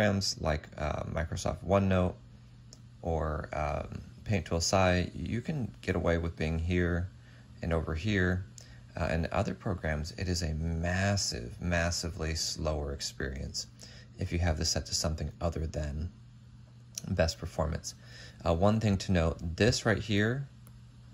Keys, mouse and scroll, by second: 20.8 right click.